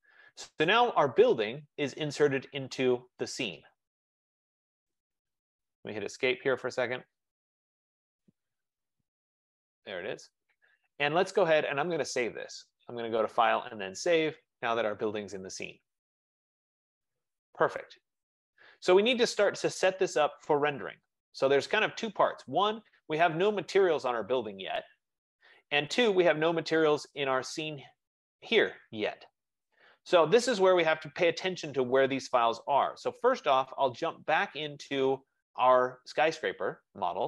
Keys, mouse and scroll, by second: 11.3 Escape, 11.3 right click, 12.3 click, 14.1 click, 19.0 click, 33.0 F15, 35.4-37.2 drag.